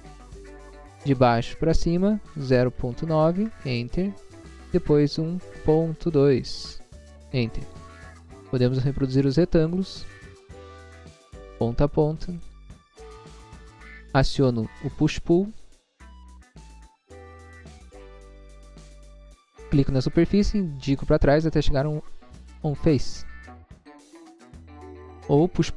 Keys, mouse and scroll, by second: 0.0 Return, 1.4 click, 2.4-3.0 typing, 3.3 Return, 4.5 click, 5.4 1, 6.4-6.8 typing, 7.0 Return, 8.6 r, 9.8 click, 11.1 click, 12.4 click, 13.5 click, 16.7 click, 18.1 click, 23.6 click, 24.9 click, 25.1 click.